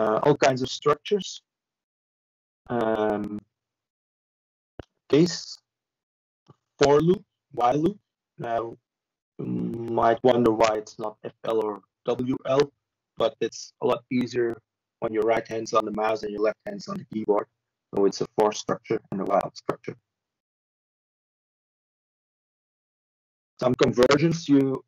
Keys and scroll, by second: 7.0 ctrl+space, 8.1 ctrl+h, 11.7 typing, 16.9-17.6 typing.